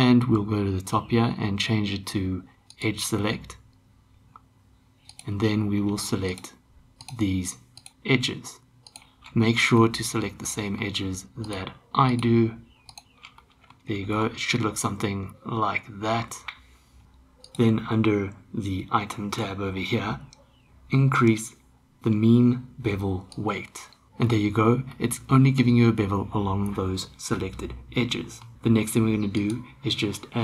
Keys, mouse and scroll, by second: 2.7 click, 5.1 click, 6.3 shift+click, 9.8-10.8 middle drag, 11.4 shift+click, 13.4-13.7 middle drag, 14.1 shift+d, 23.3 click, 25.0-28.4 middle drag, 29.4-30.4 drag.